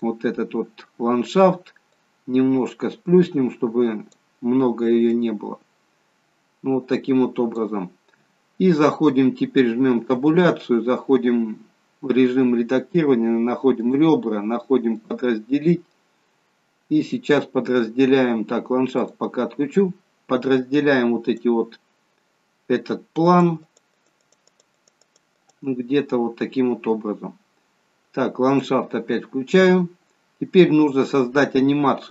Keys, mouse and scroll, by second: 1.9 click, 9.9 Tab, 13.7 click, 16.0 scroll up 4, 16.8-17.4 scroll down 1, 19.2 click, 21.2 click, 23.1 click, 23.5-24.4 click, 24.2 click, 24.7 click, 25.0 click, 28.4 click, 29.7-30.6 scroll down 1, 30.6-31.4 scroll down 1.